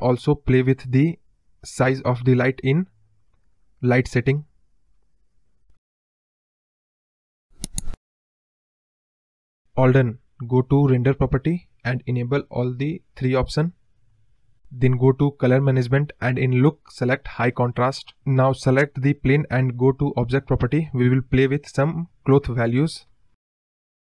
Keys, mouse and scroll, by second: 2.5 click, 3.2-4.6 drag, 5.2 click, 6.5-6.9 scroll down 2, 6.6 middle drag, 6.9 middle drag, 7.1 scroll up 6, 7.3-7.6 middle drag, 7.6 scroll down 3, 7.7-8.0 middle drag, 8.0 scroll up 1, 8.1-8.9 middle drag, 8.9 click, 9.2 scroll down 1, 9.4 KP_0, 10.6 click, 11.2 click, 12.2 click, 12.6 click, 12.9 click, 13.6 click, 13.9-14.6 scroll down 12, 14.6 click, 14.8-15.5 scroll down 7, 15.5-17.1 drag, 18.2-19.2 drag, 19.8 click, 22.8 click, 23.1 click, 23.5-24.0 scroll down 17.